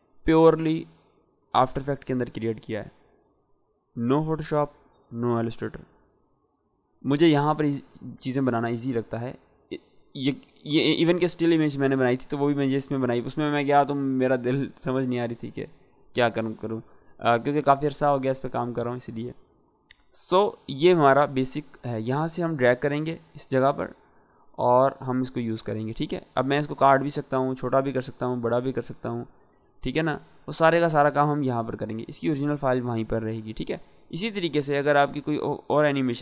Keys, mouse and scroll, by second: 22.0 click, 26.9-31.7 drag, 33.2-34.4 scroll down 1, 34.4-36.2 drag.